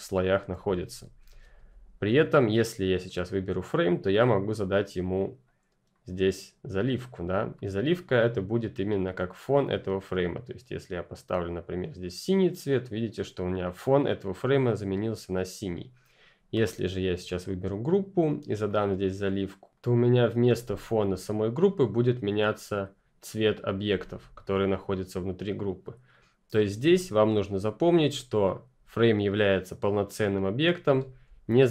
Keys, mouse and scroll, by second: 0.5 ctrl+z, 3.2 click, 5.4 click, 10.0 click, 15.7 click, 18.6 click, 19.7 click, 22.6 click, 28.8 click, 31.2 ctrl+click.